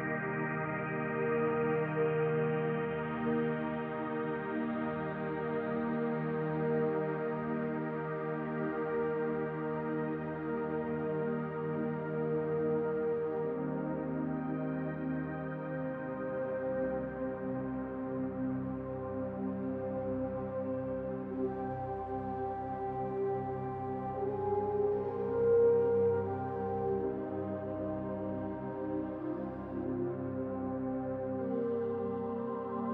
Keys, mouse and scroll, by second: 1.6 middle click, 3.1 r, 4.5 middle click, 6.2 click, 7.7 click, 10.4-10.8 scroll down 2, 10.8 middle click, 11.7-12.6 scroll up 2, 13.0 shift+d, 14.0 click, 15.5 s, 17.0 s, 25.3 r, 25.3 s, 26.4-27.1 scroll up 1, 27.1 click, 27.1-27.5 scroll up 1, 27.8 middle click, 28.7 middle click, 29.6 click, 30.7 click, 31.5 middle click, 32.7 click.